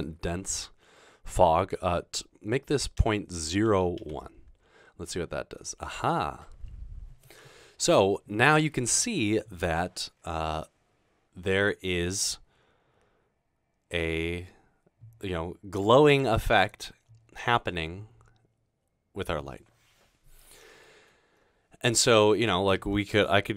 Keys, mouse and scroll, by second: 3.0-4.0 typing, 4.5 Return, 20.9-22.4 middle drag.